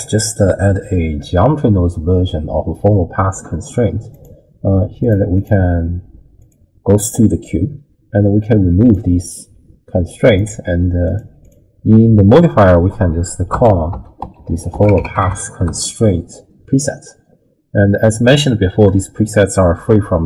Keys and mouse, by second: 4.2 click, 5.4 click, 6.4 click, 8.8 click, 11.1 click, 11.5-18.8 drag, 14.5 l.